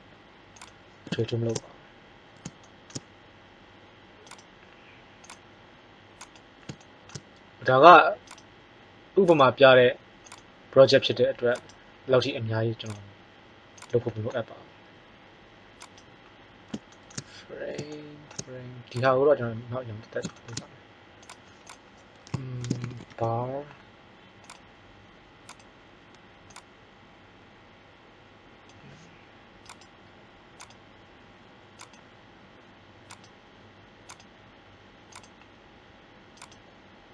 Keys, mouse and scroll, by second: 4.3 right click, 8.2 right click, 15.8-17.1 right drag, 16.5-17.1 middle drag, 18.8-20.7 drag, 21.1-22.1 drag, 29.6-30.5 right drag, 31.4 click, 33.0 right click.